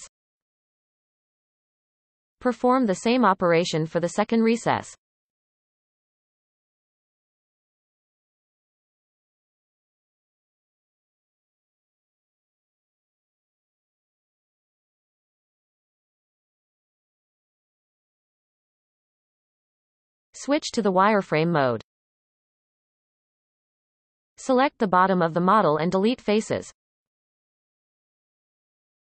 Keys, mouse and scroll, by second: 1.5 alt+a, 4.6 alt+shift+click, 6.3-9.0 middle drag, 9.0 ctrl+b, 13.9 click, 14.3-16.5 middle drag, 16.5 Tab, 17.7-18.4 scroll down 1, 18.4 Tab, 19.2 KP_1, 20.1 z, 22.7 alt+a, 23.2-24.0 scroll up 1, 24.0 shift+c, 24.6-25.9 scroll up 2, 25.9 b, 28.3-29.0 middle drag.